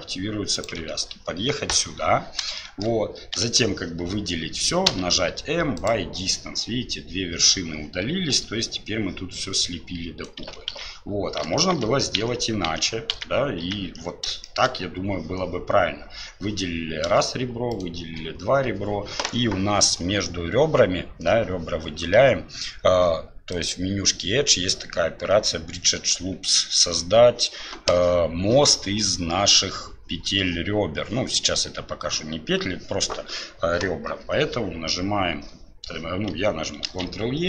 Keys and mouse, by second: 2.7 shift+middle click, 3.3 a, 8.3 1, 9.4 click, 10.7-14.0 ctrl+z, 14.4 shift+click, 23.6-26.6 drag, 36.9 ctrl+e.